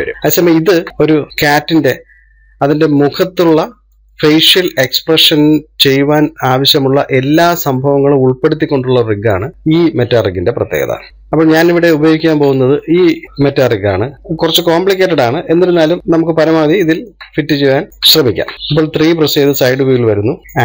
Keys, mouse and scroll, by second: 4.6-5.3 shift+middle drag, 5.3-5.7 scroll up 1, 5.7-8.7 middle drag, 11.1-12.7 middle drag, 12.7-13.1 scroll down 1, 13.1-14.1 shift+middle drag, 14.1 click, 16.3 Delete, 17.3-17.9 shift+middle drag, 17.9 scroll down 7, 18.0-19.2 middle drag, 19.2 KP_3.